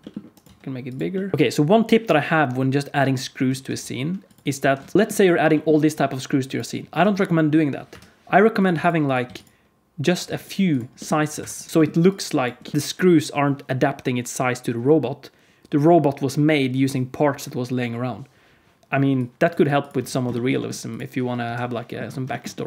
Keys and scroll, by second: 0.4 s, 3.6 shift+d, 4.5 alt+r, 4.9 s, 4.9 shift+d, 4.9 g, 6.9 alt+a, 7.8 KP_1, 8.6 x, 9.2 x, 10.9 g, 11.3 Escape, 11.7 g, 11.7 KP_1, 12.5 g, 19.5 x, 19.9 x, 21.3 KP_1.